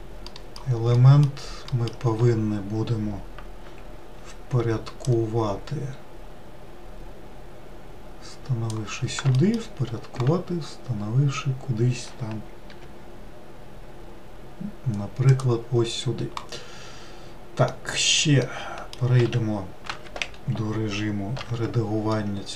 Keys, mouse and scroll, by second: 0.3 alt+middle click, 1.0 alt+middle click, 1.7 alt+middle click, 5.1 click, 9.4 alt+middle click, 12.7 g, 17.7-19.3 middle drag, 19.3 q, 20.3 w, 21.5 Tab, 22.2-22.5 middle drag.